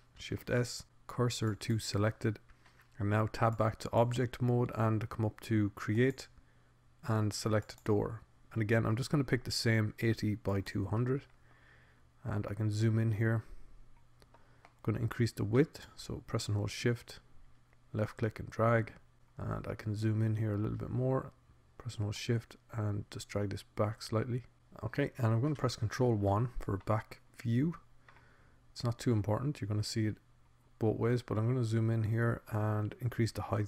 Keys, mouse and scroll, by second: 1.5 shift+s, 4.3 Tab, 7.7 click, 11.3-12.5 middle drag, 14.4-17.3 middle drag, 17.5-18.7 drag, 23.7 middle click, 27.7 ctrl+KP_1.